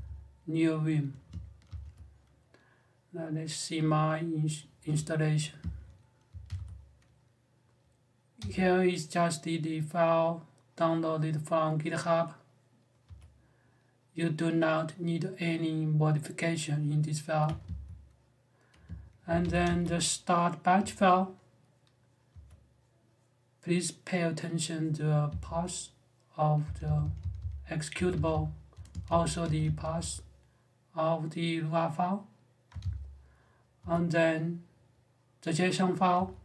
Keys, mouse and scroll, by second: 1.4 r, 6.0 ctrl+e, 6.2 ctrl+h, 8.1 i, 12.8 j, 17.2 space, 17.4 q, 19.0 ctrl+w, 19.2 ctrl+h, 19.4 j, 22.1 j, 25.0 q, 26.4-30.2 typing, 32.5-33.6 typing, 35.9 click.